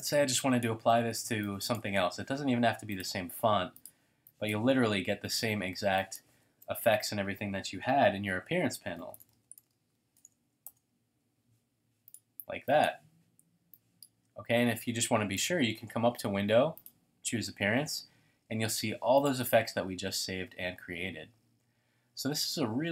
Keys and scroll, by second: 6.3-7.8 typing, 8.2 Return, 21.3 space, 21.8 space, 22.5 super+=.